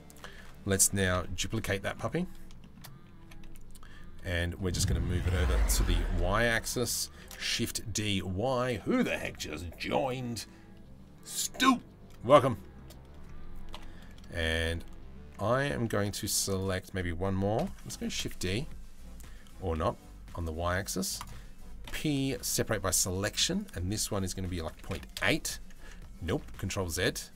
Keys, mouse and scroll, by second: 0.8 KP_3, 2.2 shift+middle click, 2.8 g, 4.8 g, 6.9 shift+d, 12.1 shift+middle click, 13.4 ctrl+l, 15.1 a, 17.2 ctrl+l, 17.7 shift+d, 23.2-24.8 drag, 23.2 p, 25.9 ctrl+z, 27.2-27.3 drag.